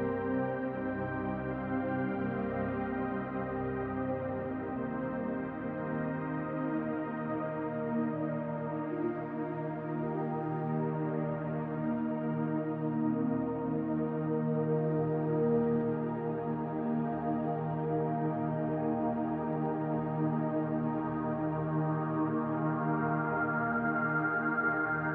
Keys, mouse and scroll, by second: 5.3-6.0 scroll up 2, 6.0-7.6 scroll down 2, 7.6 click, 8.8 scroll up 1, 12.1 click, 12.5-13.4 scroll up 2, 12.8 shift+middle click, 13.4-17.1 drag, 16.8 scroll down 1, 17.1 shift+middle click, 17.3 scroll up 1, 17.9-21.7 drag, 18.7 scroll down 1, 23.2 scroll up 1, 23.7 click, 24.4 scroll down 2, 24.6 middle click.